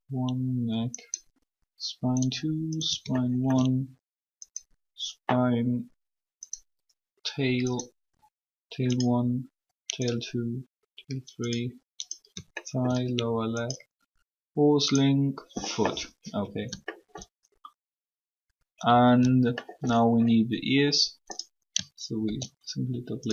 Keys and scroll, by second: 22.2 shift+d.